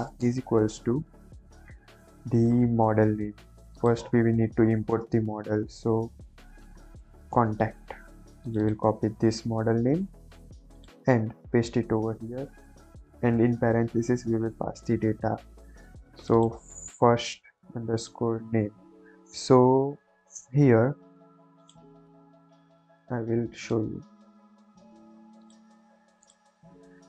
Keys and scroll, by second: 0.0-0.1 typing, 4.6 ,, 4.8 space, 6.5 shift+c, 6.6 o, 6.9 n, 7.2 Return, 9.3 ctrl+c, 11.3 ctrl+v, 12.2 shift+9, 12.5 shift+0, 12.8 Left, 17.0 ctrl+c.